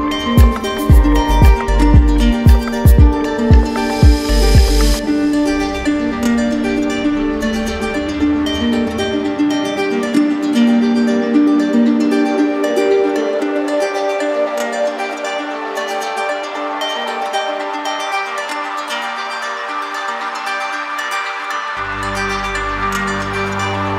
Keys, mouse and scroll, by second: 0.0 alt+click, 0.9 click, 1.3 click, 1.6 alt+click, 1.8 alt+click, 2.4 alt+click, 2.4-3.3 typing, 7.0 alt+click, 7.6 click, 9.1 click, 18.2-19.2 drag, 19.7-20.7 drag, 21.8 click, 22.6 click, 23.2 click.